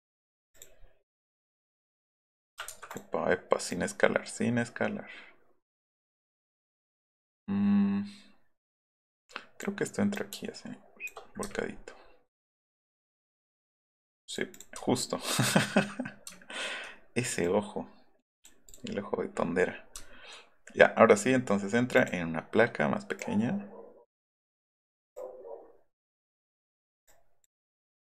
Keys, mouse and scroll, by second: 0.5 click, 1.4 click, 1.9 click, 2.6 ctrl+z, 2.9 click, 3.6 click, 9.2 click, 10.1 shift+click, 11.9 alt+middle click, 12.9-14.4 drag, 14.6 click, 14.8 alt+middle click, 17.4-18.4 drag, 18.7 click, 20.0 alt+middle click, 20.0 alt+scroll up 1, 22.0 click, 23.2 click, 25.1 click, 27.1 click.